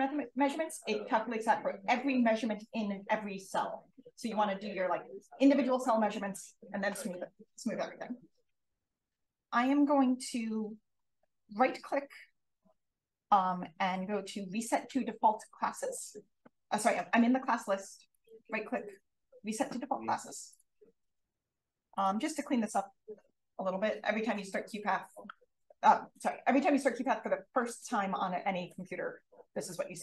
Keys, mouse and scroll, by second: 17.0-20.6 drag, 21.9 click.